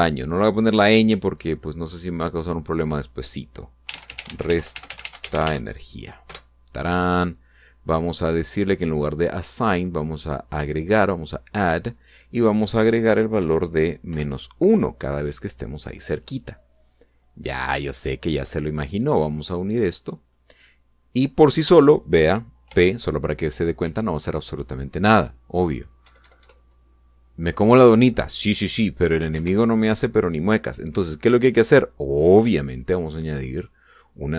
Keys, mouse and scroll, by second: 0.0 a, 0.1 n, 0.1 o, 0.5 Return, 3.0 click, 4.6-6.2 typing, 7.0 Return, 9.8 click, 11.4 click, 12.9 click, 14.1 -, 14.5 1, 14.8 Return, 19.2-21.2 drag, 23.4 p, 24.6 Up, 28.9 Down, 30.1 Escape.